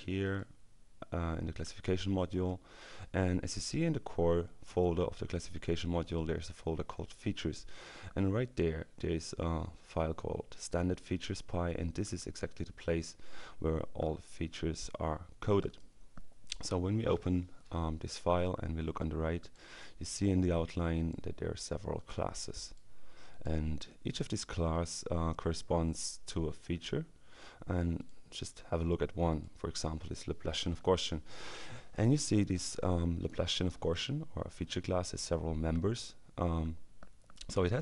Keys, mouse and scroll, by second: 0.3 click, 2.7 click, 7.5 click, 10.2-12.6 drag, 15.4 click, 19.3 click, 24.0 click, 28.1 click, 29.3 click, 37.4 click.